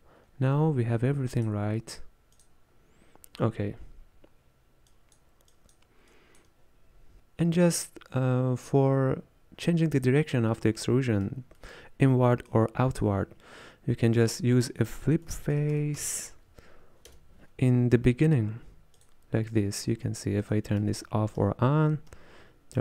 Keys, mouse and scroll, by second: 2.7-17.1 drag, 17.1 space, 20.5 click, 20.8-22.8 typing.